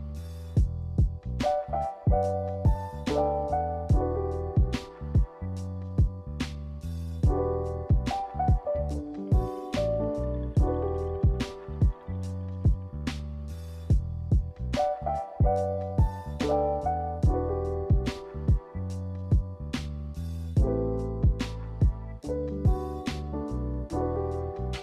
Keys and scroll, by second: 1.4 b, 6.2 a, 13.4 n, 17.0 a, 19.2 a, 23.3 q.